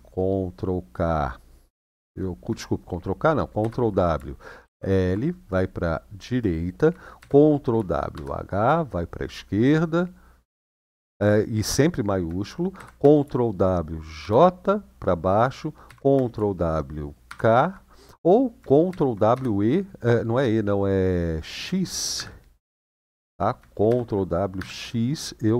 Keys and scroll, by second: 3.4 ctrl+w, 4.4 shift+l, 6.9 ctrl+w, 7.9 shift+h, 12.5 ctrl+w, 13.9 j, 15.6 ctrl+w, 17.0 k, 18.6 ctrl+w, 19.1 e, 21.9 x, 23.6 ctrl+w, 24.3 x.